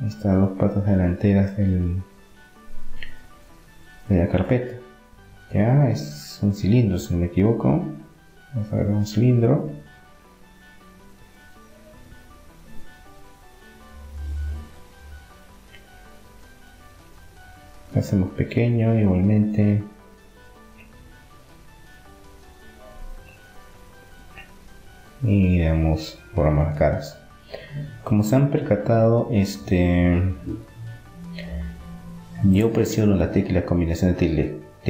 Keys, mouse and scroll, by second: 1.9 KP_3, 3.9-6.9 drag, 6.4 shift+a, 6.9 middle click, 18.4 s, 20.4-23.1 middle drag, 22.5 Tab, 23.9-25.8 drag, 24.8-26.4 right drag, 25.8 Delete, 27.4-30.2 middle drag, 28.4 click, 29.4 Delete, 30.4-31.9 middle drag, 31.9-33.8 drag, 32.9-34.8 right drag.